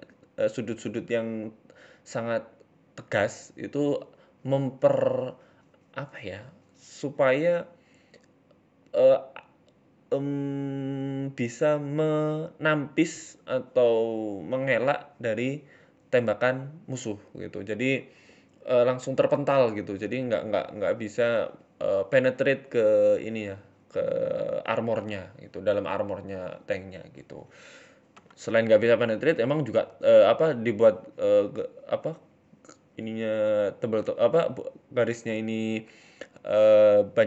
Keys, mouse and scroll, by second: 1.1 s, 2.7 right click, 2.9 alt+shift+Right, 3.5 a, 3.6 a, 4.0 alt+shift+Right, 5.5 s, 6.8 Tab, 7.0 scroll down 4, 7.1 middle click, 8.0 KP_1, 9.0 ctrl+s, 14.5-15.0 scroll up 3, 15.0 shift+middle click, 15.3 middle click, 15.8 shift+a, 18.9 KP_3, 19.5 KP_1, 20.3 g, 21.1 s, 22.3 g, 23.3 s, 24.3 s, 24.9 g, 26.1-26.6 scroll up 3, 26.6 scroll up 1, 26.8 Tab, 27.0 click, 27.4 shift+middle click, 27.8 e, 28.3 s, 28.8 e, 29.9 e, 30.5 s, 31.3 e, 32.4 s, 33.6 ctrl+r, 34.4 s, 35.5 scroll down 3, 35.8-36.4 scroll up 8, 36.3 shift+middle click, 36.8 click.